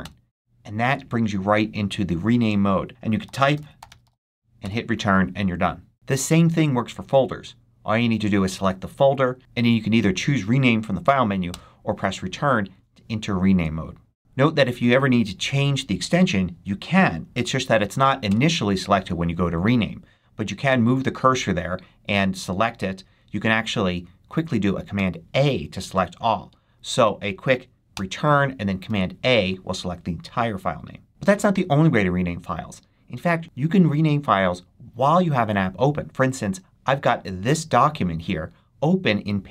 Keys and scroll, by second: 3.0-4.7 typing, 18.2 Return, 24.9 super+a, 28.8 super+a.